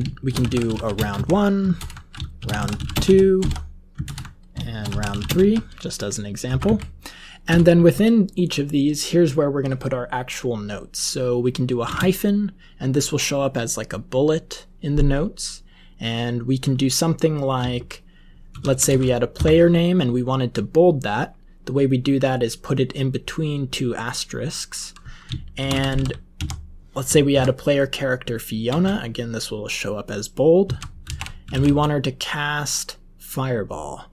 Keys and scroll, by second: 0.0-5.6 typing, 6.6-7.9 typing, 11.9 space, 18.5 *, 18.6 *, 19.3 Left, 25.3-26.8 typing, 27.3 Right, 28.6 space, 30.3-32.0 typing.